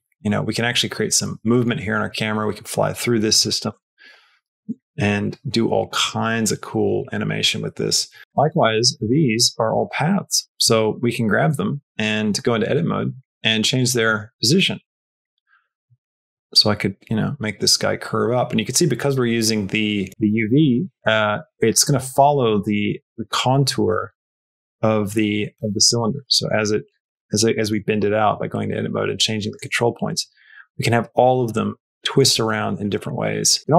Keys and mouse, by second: 1.7 middle click, 2.0-3.3 shift+middle drag, 3.4 space, 3.6-8.2 shift+middle drag, 8.3 shift+middle click, 8.5 middle click, 9.1 middle click, 9.4 middle click, 11.3 Tab, 13.6 click, 14.7 click, 15.9 click, 16.3 g, 20.1 g, 23.0-25.6 middle drag, 25.8 middle click, 27.0 shift+middle click, 27.7 middle click, 28.1-29.4 middle drag, 29.6 shift+middle click, 30.2 middle click, 31.6 middle click, 32.1 Tab, 32.4 middle click, 33.1 middle click, 33.6 middle click.